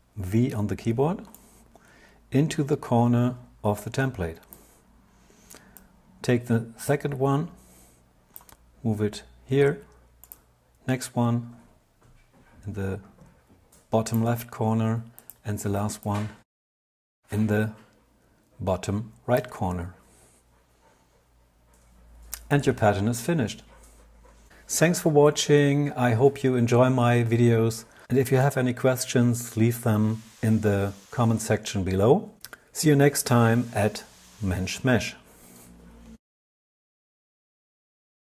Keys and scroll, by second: 25.3 Tab, 26.3 super+0, 28.3 Escape, 28.9 Escape.